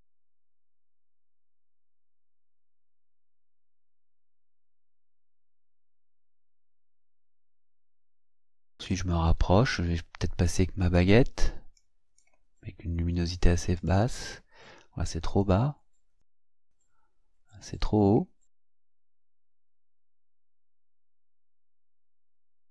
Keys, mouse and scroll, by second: 2.4-3.8 drag, 4.6-5.8 drag, 6.4-8.0 drag, 8.5-9.1 ctrl+scroll up 4, 10.4 click, 11.8 click, 13.8 click, 15.3 click, 16.2 click, 18.7 click, 19.4 click, 20.8 click, 21.8 click, 22.6 click.